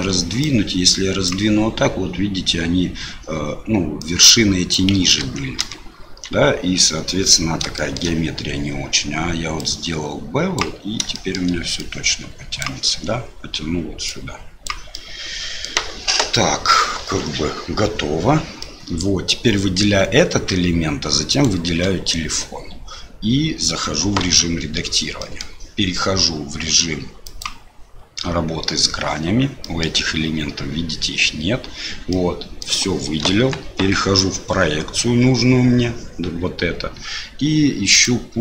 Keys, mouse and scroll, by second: 4.0 click, 5.2 ctrl+z, 5.6 ctrl+z, 7.7 shift+click, 9.6-10.6 drag, 11.1 shift+click, 11.7-12.8 drag, 14.0 click, 14.9 middle click, 15.5 click, 17.0 Tab, 18.6 click, 21.3 shift+click, 24.2 Tab, 25.2 middle click, 27.3-29.3 drag, 29.6 middle click, 32.1 middle click, 33.2 KP_1, 33.6 KP_3, 37.9-38.4 drag.